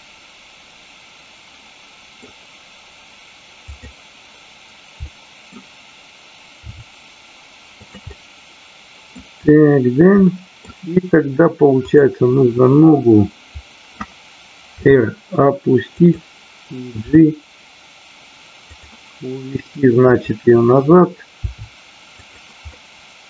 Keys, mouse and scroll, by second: 3.7 click, 4.9 middle click, 6.6 r, 7.9 click, 8.1 middle click, 10.2 middle click, 11.9 click, 12.9 middle click, 14.7 r, 15.8 click, 16.9 g, 18.7 click, 20.1 click, 21.3 r, 22.2 click, 22.7 middle click.